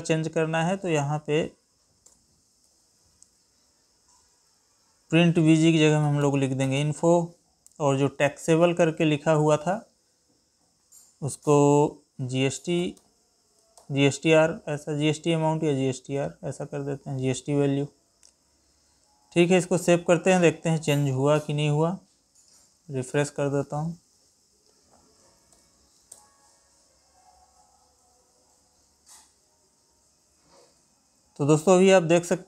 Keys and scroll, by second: 0.2 ctrl+c, 2.6 ctrl+v, 21.0 Escape, 25.5 alt+p.